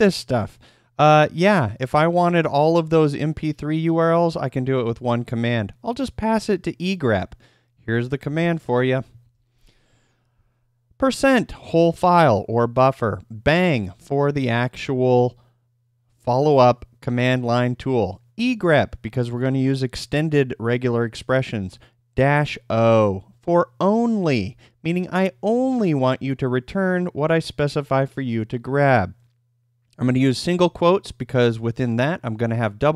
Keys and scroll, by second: 9.2 ctrl+p.